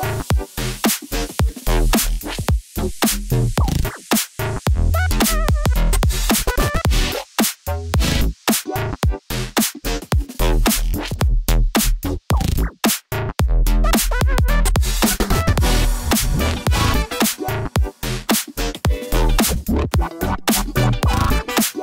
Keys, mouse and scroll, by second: 0.4 Tab, 1.5-2.0 middle drag, 2.3 click, 3.8 middle click, 5.3 middle click, 6.7 g, 6.9 y, 9.0 click, 9.0-10.1 typing, 12.7 click, 12.9 g, 13.1 y, 14.5 click, 14.7 middle click, 16.2 click, 17.2 click, 18.0 shift+click, 18.6 g, 18.7 y, 19.7 x, 20.2 z.